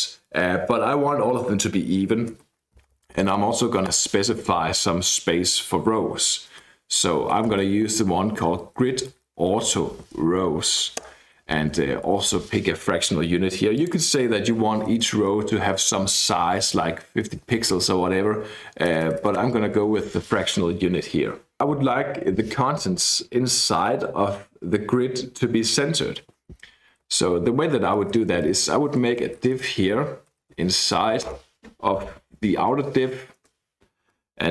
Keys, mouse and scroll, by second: 2.8 Right, 3.0 Right, 3.1 Right, 3.3 Right, 3.9 Return, 7.1-10.1 typing, 10.4 Down, 10.7 Down, 11.0 Return, 11.5-12.7 typing, 13.7 click, 15.0 BackSpace, 15.2 BackSpace, 16.4-17.9 typing, 18.9-20.4 typing, 27.1-32.8 typing, 33.4 Return.